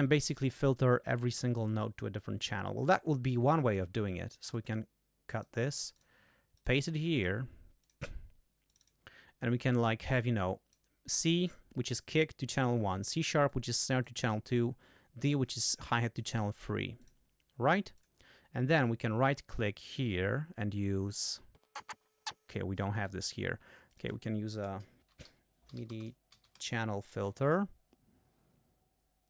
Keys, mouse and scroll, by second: 0.3 click, 3.6 click, 4.4 right click, 5.9 click, 6.5 click, 7.1 click, 7.8 click, 8.7 click, 10.3 click, 13.5 click, 15.3-16.3 drag, 17.0 click, 17.9 click, 18.7-21.2 right drag, 21.6 click, 21.8 right click, 21.8 click, 21.9 click, 21.9 right click, 22.2 click, 22.9 right click, 23.8 click, 24.8-27.0 typing.